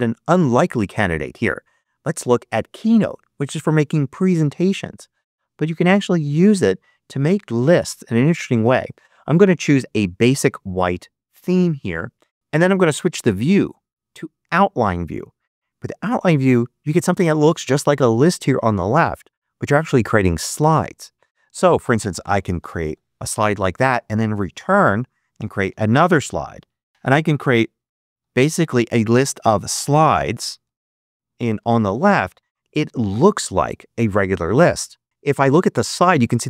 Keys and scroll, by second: 22.5 shift+o, 22.8 e, 24.5 Return, 25.0-26.1 typing, 27.2 Return, 27.5-28.4 typing, 28.5 Return, 29.6 shift+f, 30.0 u, 30.5 Return, 31.3 shift+f, 31.6 v.